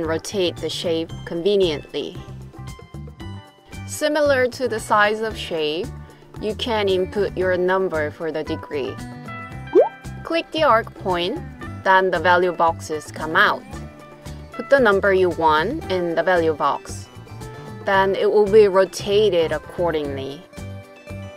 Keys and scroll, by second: 15.0-16.5 typing, 17.0 Return.